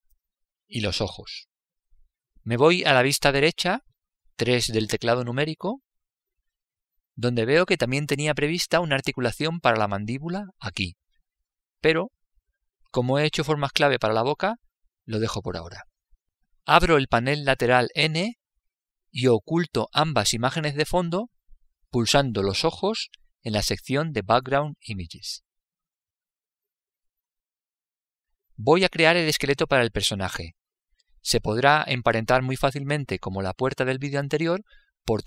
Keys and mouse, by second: 4.1 KP_3, 19.2 n, 20.5 click, 24.3-27.0 drag, 27.4 click, 29.3 click.